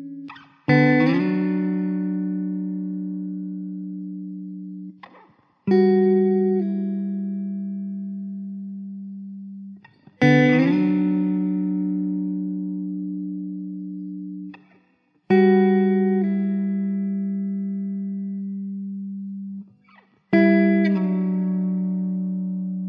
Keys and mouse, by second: 1.0 Delete, 2.3 Delete, 3.3 3, 4.9 Delete, 7.0 alt+w, 7.6 alt+middle click, 9.2 alt+w, 11.1 middle click.